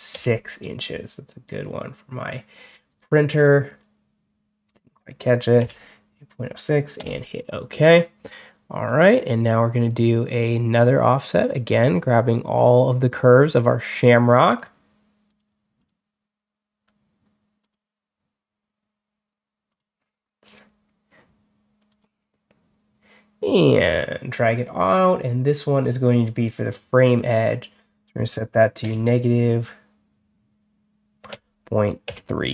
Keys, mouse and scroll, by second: 0.0 6, 3.5 click, 5.5 6, 8.7 click, 9.7 click, 10.6 click, 11.3 click, 13.8 click, 14.3 click, 15.1 click, 15.6 click, 17.5 click, 19.6 click, 20.3 click, 21.8 click, 23.3-26.1 drag, 28.7 -, 31.2 ..